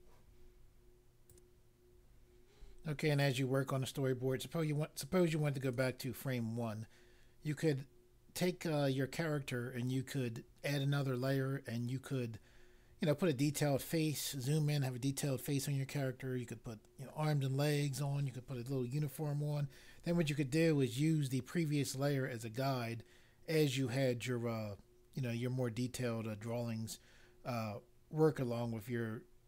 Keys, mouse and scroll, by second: 1.2 click, 5.5 click.